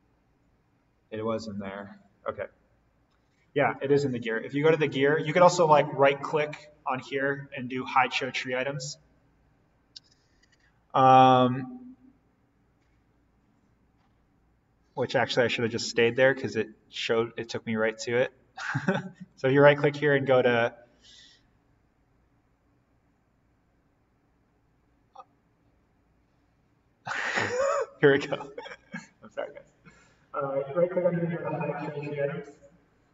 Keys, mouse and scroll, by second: 3.6 click, 6.8 right click, 18.1 click, 19.1 right click, 31.8 click.